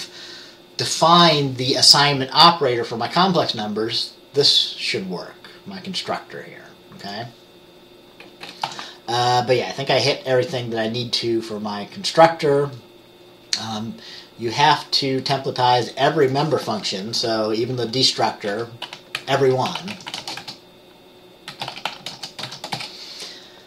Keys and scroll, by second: 8.8 ctrl+s, 17.3 Return, 18.6-20.5 typing, 21.6-23.0 typing.